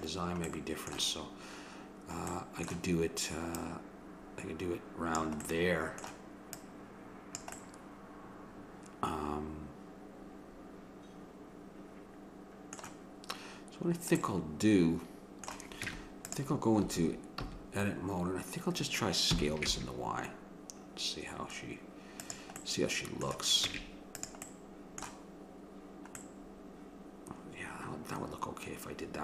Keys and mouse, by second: 0.5-3.5 middle drag, 3.5-5.5 drag, 5.5-6.5 middle drag, 6.5-8.4 drag, 7.3-9.6 middle drag, 14.2-15.8 middle drag, 15.8 Tab, 16.8 a, 17.5 a, 19.3 s, 23.7 Tab, 27.7 middle click.